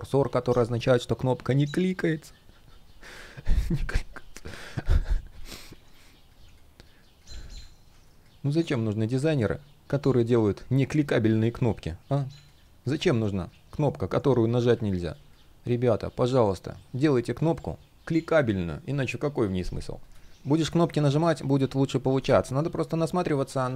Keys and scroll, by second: 7.2 super+space.